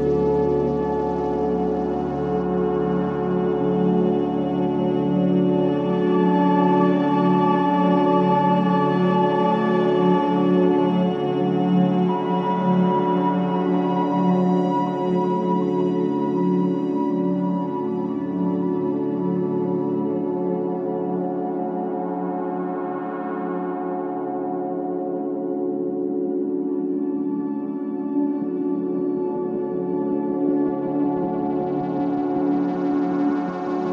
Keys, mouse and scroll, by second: 0.9-1.6 scroll up 1, 1.6 click, 1.9 shift+click, 2.1 shift+click, 2.3 shift+click, 2.5 shift+click, 3.1 middle click, 3.5 KP_1, 4.1 g, 6.5 scroll down 1, 6.7-8.1 middle drag, 8.1 KP_1, 8.9 1, 9.2 click, 9.9 shift+z, 10.1 click, 10.6 shift+z, 11.3 g, 12.9 shift+middle click, 13.2 Tab, 13.5 click, 13.9-14.5 shift+middle drag, 14.5-16.0 scroll up 1, 17.2-18.7 shift+middle drag, 20.7 scroll up 1, 20.9-21.3 shift+middle drag, 21.3 click, 21.5 Tab, 22.1-23.1 scroll up 2, 23.1 k, 30.0 3, 30.3 click, 30.8 shift+click, 31.1 scroll down 1, 31.3 middle click, 32.3 e, 33.1 ctrl+z, 33.8 p.